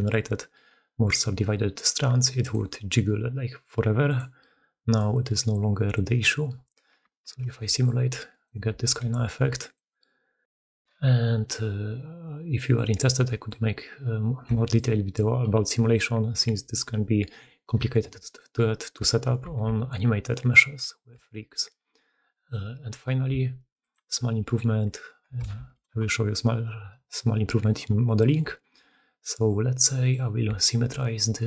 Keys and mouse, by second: 7.0 shift+space, 7.6 click, 7.8-8.2 middle drag, 8.4 alt+middle drag, 9.1 r, 10.3-12.6 alt+middle drag, 10.9 alt+r, 11.0 alt+r, 12.8-13.2 middle drag, 13.7-14.0 middle drag, 19.4 shift+space, 20.8 shift+drag, 25.2-26.1 shift+middle drag, 25.5 shift+2, 28.2 shift+middle click, 28.4 shift+drag, 29.3-30.0 middle drag, 30.4 middle click.